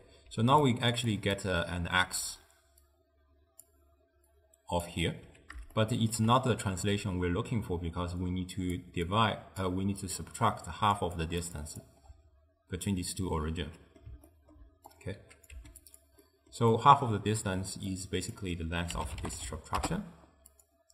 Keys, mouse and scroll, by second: 0.4-5.2 typing, 0.7 click, 1.2 click, 3.0-3.7 drag, 4.4-4.9 drag, 5.8-7.8 shift+middle drag, 7.8-12.1 typing, 8.5 click, 9.2-9.7 drag, 10.1-10.5 drag, 10.8 click, 11.3 click, 11.7 click, 13.7-15.0 middle drag, 15.0 click, 15.6 g, 16.3-18.0 middle drag, 18.0 click.